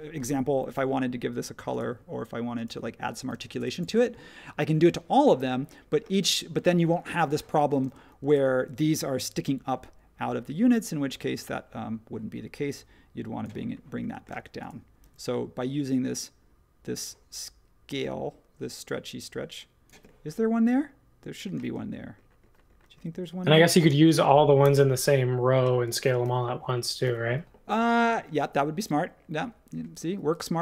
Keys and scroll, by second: 0.6 b, 3.4 space, 5.4 space, 6.1 space, 7.8 space, 9.3 s, 14.3 space, 15.0 s, 21.6 space, 23.1 super+z, 23.9 space, 24.6 BackSpace, 26.2 BackSpace, 27.0 BackSpace.